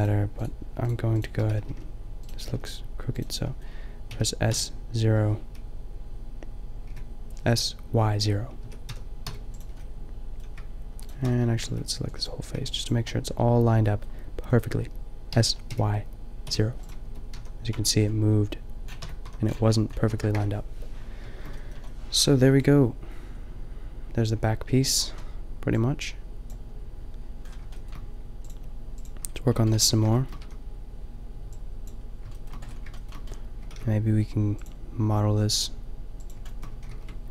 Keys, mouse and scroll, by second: 1.5 s, 2.4 s, 3.2 click, 3.6 click, 4.1-7.3 drag, 4.1 s, 8.6 s, 9.9 middle click, 11.0-12.5 middle drag, 11.6 b, 12.5 b, 13.1 middle click, 15.3 s, 17.0 Tab, 17.4 a, 17.7 Tab, 18.0 click, 18.9 Tab, 19.2 a, 20.0 a, 20.3 KP_0, 27.5 drag, 29.8 Tab, 30.3 a, 33.7 ctrl+r, 36.6 click, 36.7 a, 36.9 ctrl+r.